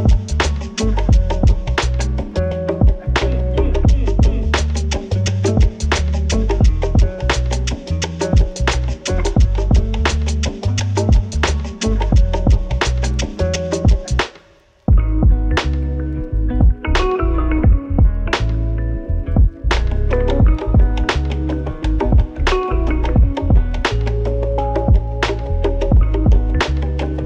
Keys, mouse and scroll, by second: 3.3 ctrl+s, 5.5-8.5 drag, 10.8 click, 13.8-16.2 drag, 24.4-25.6 typing, 26.6 click, 27.0-27.2 typing.